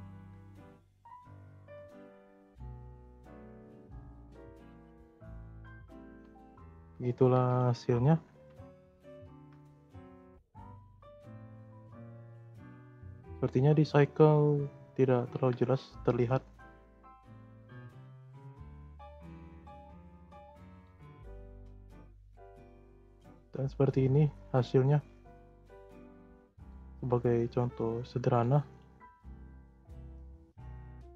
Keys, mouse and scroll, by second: 0.9 0, 2.8 scroll up 1, 2.8-5.1 middle drag, 5.1 shift+scroll up 1, 5.1-7.4 shift+middle drag, 7.4-8.6 drag, 8.6 0, 8.7 0, 10.3-12.7 middle drag, 12.7 click, 13.8-16.5 drag, 16.5-17.6 middle drag, 17.6 scroll up 1, 17.9 middle click, 18.1-18.9 scroll up 2, 18.9-20.6 drag, 20.6 space, 21.7 space, 22.6-23.1 drag, 23.1 space, 24.2 space, 25.0-26.5 drag, 26.5 space, 28.2 space, 28.7 click, 28.9-29.3 scroll down 4, 29.6-30.4 middle drag, 30.4 scroll up 1, 30.6-30.9 scroll down 4, 30.9-31.1 middle drag.